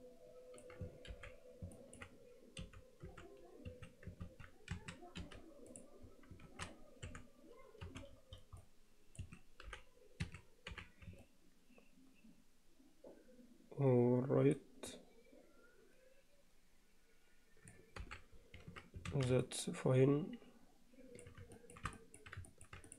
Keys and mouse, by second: 1.2 alt+h, 1.8 middle click, 2.6 e, 4.4 ctrl+z, 4.8 a, 5.2 m, 6.5 alt+a, 7.1 3, 7.8 c, 10.2 g, 10.7 h, 11.2-13.2 alt+middle drag, 13.2 alt+click, 13.4-14.6 alt+middle drag, 14.9-17.8 alt+middle drag, 18.0 alt+h, 19.1 alt+a, 19.4-21.2 alt+middle drag, 21.6 shift+middle click, 22.0 alt+middle click, 22.5 ctrl+middle click, 22.9 click.